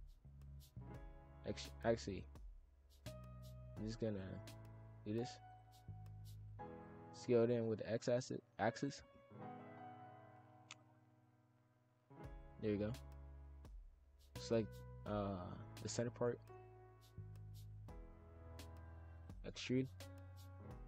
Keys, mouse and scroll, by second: 0.5 shift+f, 2.2 ctrl+z, 2.4 ctrl+z, 3.0 shift+f, 4.0 ctrl+r, 6.1 shift+f, 7.0 s, 10.7 alt+click, 11.4 click, 13.4 click, 14.7 shift+f, 16.1 shift+click, 16.2 shift+f, 17.6 shift+click, 17.7 shift+f, 19.1 shift+d, 20.3 click.